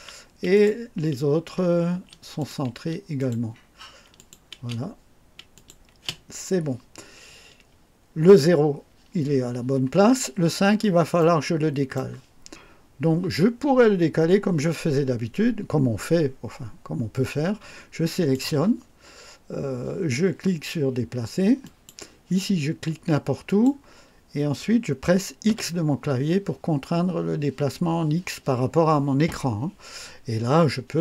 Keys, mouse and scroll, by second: 0.5 click, 2.0 space, 2.4 click, 2.8 space, 3.2 click, 4.2 click, 4.6 space, 5.6 click, 6.0 space, 11.2-12.2 right drag, 18.1 click, 21.7 click, 23.5 click, 25.5 x.